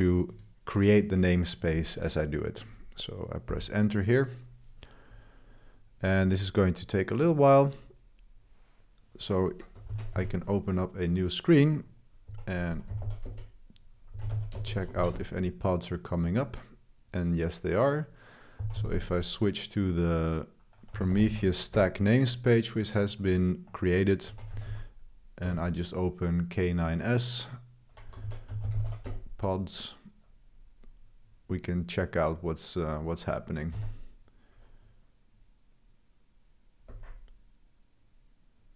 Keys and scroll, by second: 3.5 Return, 9.9 ctrl+b, 10.1 c, 12.2-15.1 typing, 18.3-19.2 typing, 20.7-21.7 typing, 24.0-25.1 typing, 25.4 Return, 28.0-29.5 typing, 33.7 l, 36.8 Escape.